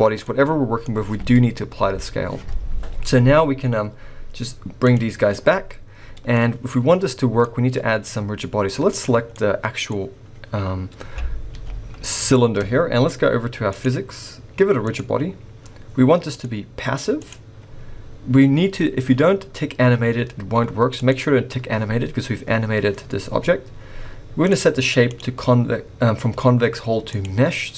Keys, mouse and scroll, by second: 0.2 middle click, 4.8 click, 5.5 middle click, 6.4 scroll up 2, 7.3 scroll down 3, 7.4 middle click, 8.1 scroll up 1, 8.9 click, 9.3 middle click, 10.9 scroll up 1, 11.5 g, 13.7 click, 14.8 click, 16.3 click, 18.7 scroll up 1, 21.0 click, 25.1 click.